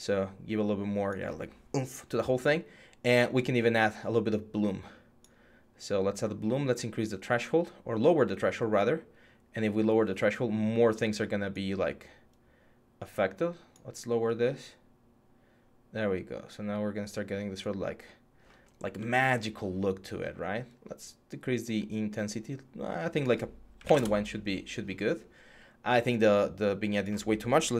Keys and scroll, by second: 23.6 1.